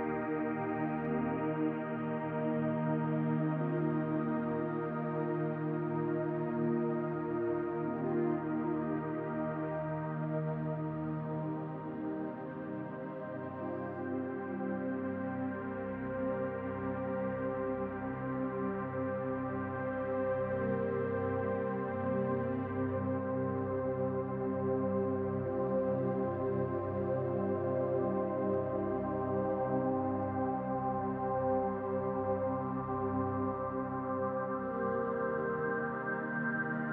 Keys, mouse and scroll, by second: 9.4 click, 11.8-12.5 scroll up 2, 12.9 Tab, 14.7 e, 17.1 e, 21.2 m, 26.8 click, 29.3 alt+shift+click, 32.7 e.